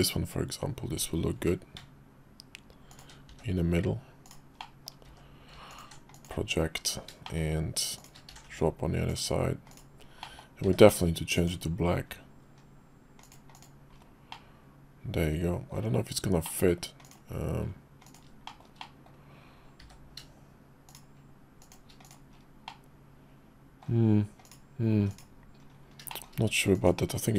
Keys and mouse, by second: 1.3 g, 3.3 s, 4.6 middle click, 5.1 d, 7.2 shift+click, 7.9 shift+click, 8.3 alt+x, 9.3 click, 9.7 click, 10.2 click, 11.6 d, 13.5 click, 14.3-15.7 middle drag, 16.4 middle click, 17.0 click, 18.0 click, 18.5 shift+middle click, 18.8 middle click, 20.9 shift+d, 22.0 middle click, 22.7-23.8 middle drag, 24.4 click, 24.9 x, 26.1 shift+middle click, 26.7 click.